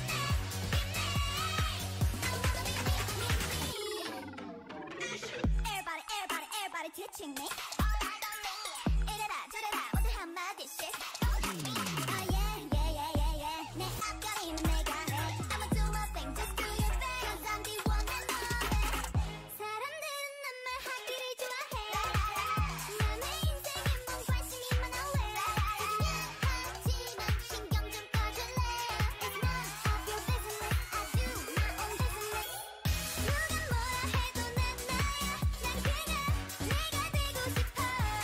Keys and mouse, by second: 4.1 middle click, 4.4-6.3 right drag, 5.1-15.2 drag, 5.1 s, 6.3 s, 6.5 s, 10.1-11.2 right drag, 11.2 g, 12.7 g, 14.3 s, 15.2 ctrl+z, 15.5 s, 15.6 click, 16.9 s, 17.7 KP_3, 19.8-20.9 drag, 20.1 s, 20.1 right click, 21.1 s, 22.3-24.1 drag, 22.3 middle click, 22.3 right click, 24.1-25.4 right drag, 24.3 ctrl+z, 25.4 s, 26.0 a, 27.5-29.3 drag, 28.6 ctrl+z, 28.9 ctrl+z, 29.7 s, 30.3 click, 30.3-31.8 middle drag, 30.3 right click, 30.7 z, 31.8 Tab, 34.7-37.2 drag, 36.2 Tab, 37.2 middle click.